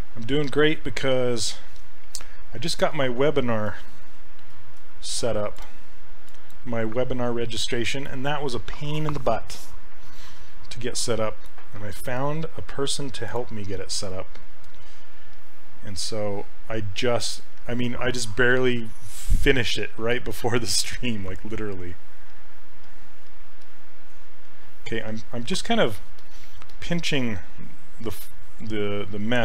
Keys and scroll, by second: 1.1 s, 4.2 shift+f, 4.9 shift+f.